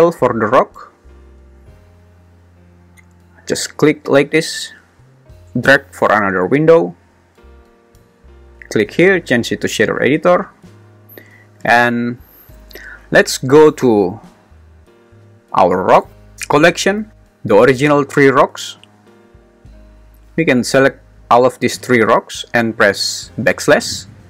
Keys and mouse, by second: 3.4-6.1 drag, 8.0-10.0 drag, 21.8 shift+click, 23.5 /.